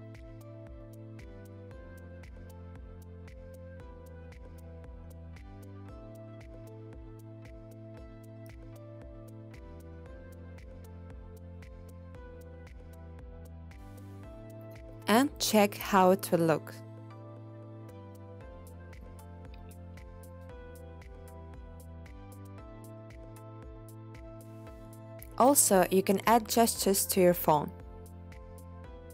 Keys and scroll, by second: 0.0-0.2 typing, 2.8-4.3 typing, 10.3 o, 16.6 0.